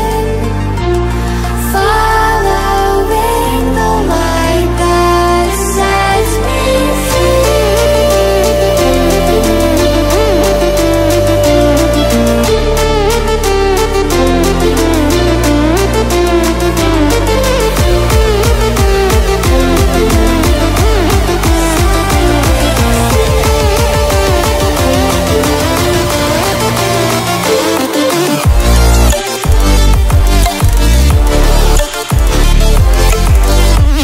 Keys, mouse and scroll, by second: 7.4 right click, 9.9 click, 12.7-28.4 drag, 29.6 click, 30.1 ctrl+alt+scroll up 1, 31.4-33.3 drag, 33.3 ctrl+alt+scroll down 1.